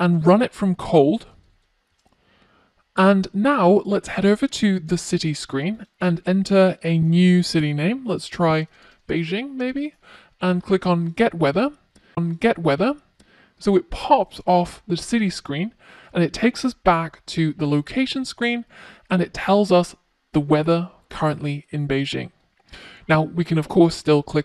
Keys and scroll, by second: 0.8 Tab.